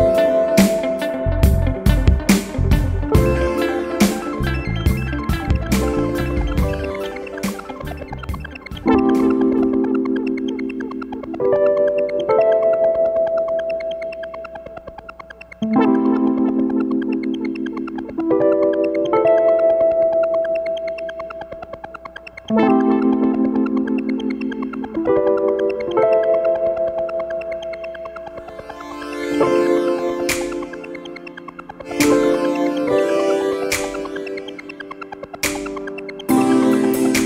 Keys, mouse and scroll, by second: 1.9 click, 4.0 click, 6.2 click, 8.2 click, 9.9 click, 11.4 click, 14.5 click, 15.2-15.6 scroll up 1, 16.9 Escape, 17.7-18.4 scroll down 2, 18.7 scroll up 2, 20.0 click, 24.9 click, 27.1 click, 28.3 click, 29.7 click, 32.7 click, 33.8 click, 35.1 click, 36.9-37.2 drag.